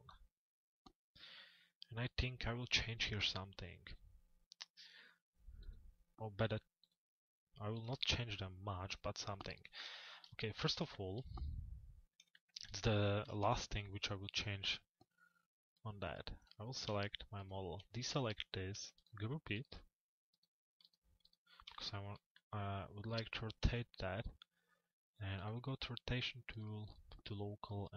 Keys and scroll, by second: 8.8 p, 23.2 c.